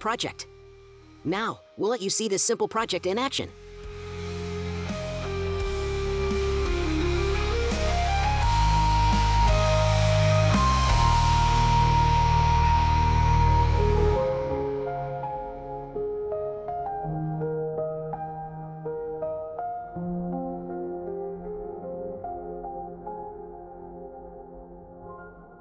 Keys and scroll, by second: 0.1 ctrl+a, 0.4-1.9 typing, 1.8 scroll, 3.2 scroll, 3.4-6.0 typing, 6.1 ctrl+v, 6.3 ctrl+c, 6.5 ctrl+v, 7.5-8.3 typing, 8.7 ctrl+c, 8.8 ctrl+v, 10.0 ctrl+c, 10.0 ctrl+v, 10.6 scroll, 14.2 scroll, 14.8 BackSpace, 14.9 Return, 15.6 scroll, 16.4-17.4 scroll, 17.9 scroll, 18.7-19.3 scroll, 19.7-20.0 scroll, 20.4-20.9 ctrl+scroll.